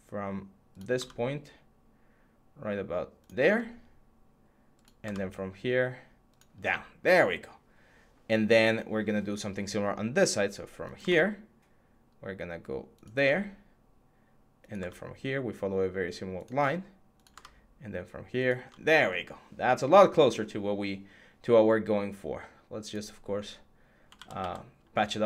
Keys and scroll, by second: 24.0 ctrl+z.